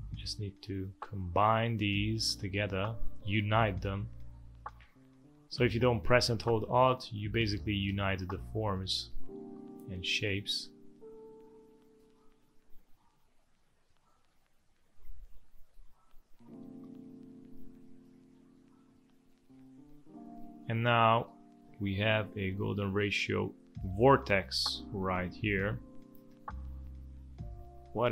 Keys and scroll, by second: 9.5 space, 21.9 v, 23.1 space.